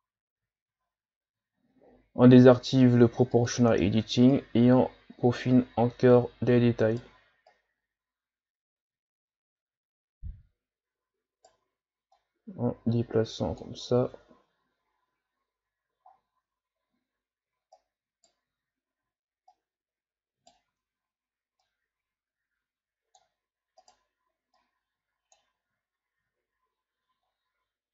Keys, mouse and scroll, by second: 0.3-0.8 scroll up 5, 0.8 Tab, 3.3 click, 4.3 right click, 7.5 right click, 12.2-14.1 drag, 14.1 Tab, 15.2-16.1 scroll down 3, 16.1-16.5 scroll up 3, 16.5 Tab, 17.8 right click, 18.5 ctrl+z, 19.5 right click, 20.7 ctrl+z, 21.6-23.8 drag, 23.8 right click, 24.6 click, 25.6 ctrl+z, 26.0-27.2 scroll down 2, 27.3-27.9 shift+scroll down 3.